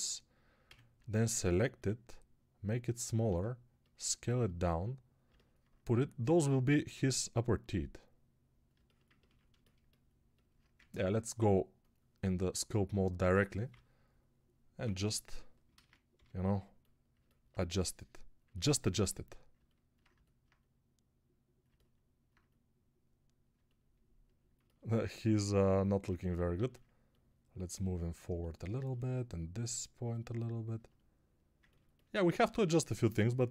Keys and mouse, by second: 0.5 a, 3.1-33.5 drag, 3.1 s, 10.6 ctrl+Tab, 13.6-14.7 ], 15.6 ctrl+z, 16.0 g, 26.5 alt+q, 32.3 alt+q.